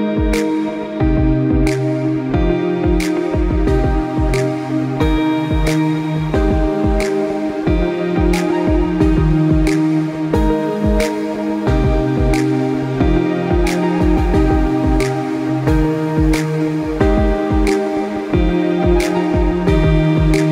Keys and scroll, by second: 5.0 ctrl+i, 5.1 ctrl+z, 12.6 ctrl+z, 17.2 ctrl+0.